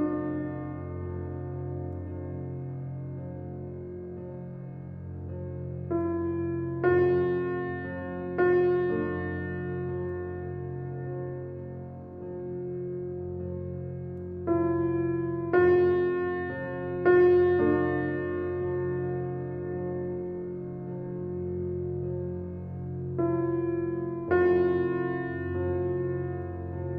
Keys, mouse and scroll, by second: 0.1-0.6 drag, 0.7 click, 2.7 click, 3.3 g, 5.1-5.5 drag, 6.2-8.8 drag, 9.2 g, 10.3-11.9 middle drag, 12.3 ctrl+z, 13.1 g, 15.1 click, 15.4 click, 15.6 scroll down 1, 15.9-17.4 middle drag, 17.6 click, 18.1 Tab, 18.3 click, 18.9 alt+middle click, 20.0 e, 21.7 s, 23.4 middle click, 24.3 e, 26.8 Tab.